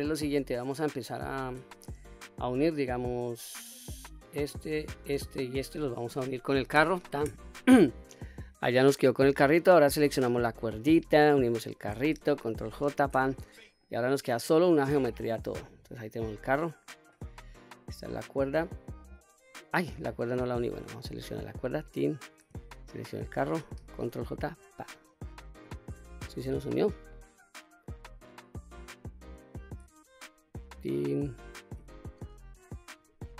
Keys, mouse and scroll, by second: 1.1 click, 1.8 shift+click, 3.9 click, 4.8 shift+click, 5.4 shift+click, 6.7 ctrl+j, 9.8 click, 11.2 shift+click, 12.5 ctrl+j, 13.8 click, 14.3 click, 15.4-15.9 scroll down 1, 15.9-17.1 middle drag, 19.0 click, 19.5 click, 21.6 click, 22.8 shift+click, 24.5 ctrl+j, 26.5-27.1 scroll up 1, 27.1-27.9 middle drag, 27.1 scroll up 1, 28.3 click, 29.2 click, 30.5 shift+click, 33.0 ctrl+j.